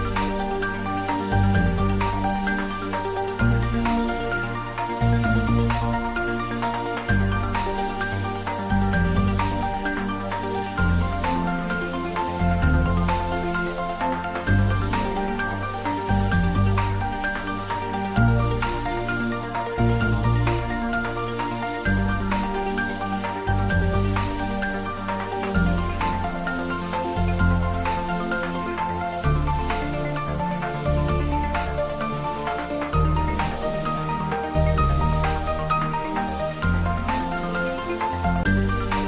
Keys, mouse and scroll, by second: 0.7 click, 4.0-6.6 drag, 8.0 Tab, 8.5-10.4 scroll down 1, 10.8 scroll down 1, 11.4-11.9 middle click, 12.2-13.9 scroll up 1, 13.9 scroll down 1, 15.5 click, 25.0 scroll up 1, 26.8-28.0 drag, 28.9-29.2 scroll down 1, 29.6-30.3 middle drag, 31.1 click, 32.3 Tab, 33.4 click, 34.5-34.9 scroll up 1, 34.9-35.6 middle click, 35.6 scroll up 1, 36.8-37.5 middle drag, 38.3 click.